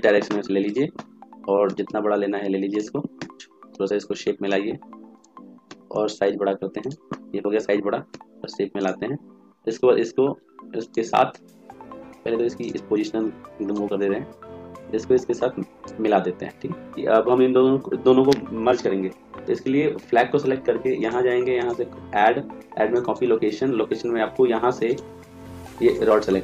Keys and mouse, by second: 1.5 s, 3.1 s, 5.5 s, 7.9 s, 9.2-14.8 drag, 9.2 right click, 20.9-22.7 drag, 24.8 click.